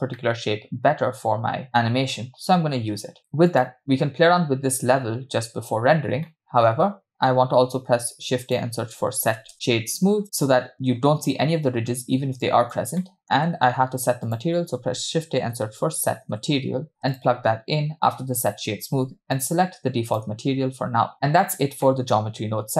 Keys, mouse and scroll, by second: 0.5-2.2 middle drag, 3.5 middle click, 12.5 click, 13.1-13.5 middle drag, 19.4-20.4 drag, 21.9 middle click.